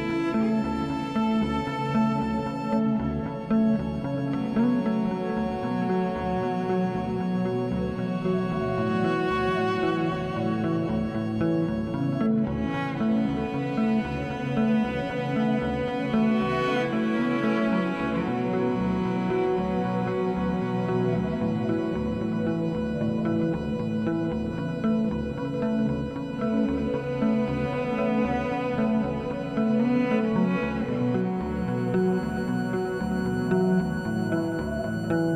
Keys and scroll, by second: 4.7 ctrl+BackSpace, 6.6 alt+BackSpace, 9.1 z, 10.8 alt+shift+z, 17.8 ctrl+d.